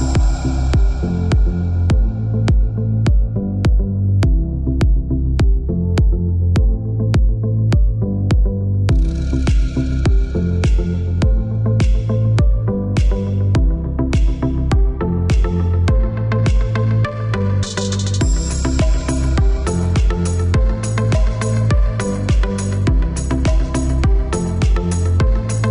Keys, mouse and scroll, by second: 1.6 KP_3, 2.1 KP_Enter, 4.2 click, 6.7 click, 9.8 click, 10.7 middle click, 13.5 click, 14.9 click, 17.4 middle click, 19.5 click, 20.2 middle click, 24.3 middle click.